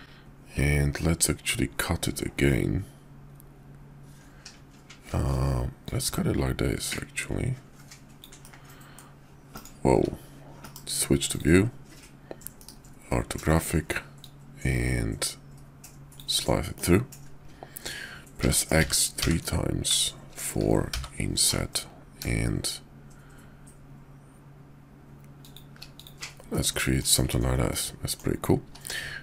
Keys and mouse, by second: 5.8-9.7 drag, 10.0 `, 10.6 shift+v, 12.5 KP_5, 14.2-25.6 drag, 26.5-27.0 middle drag, 27.1 KP_5, 27.7-28.2 drag, 28.6 q.